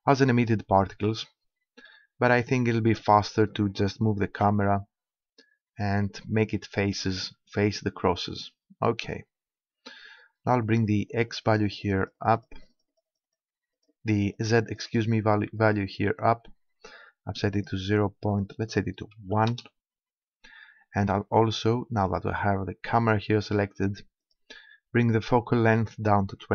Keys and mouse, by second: 4.3 KP_0, 4.9-7.4 middle drag, 10.7-17.3 drag, 18.3-20.1 drag, 23.0-24.3 middle drag, 24.3-26.5 drag.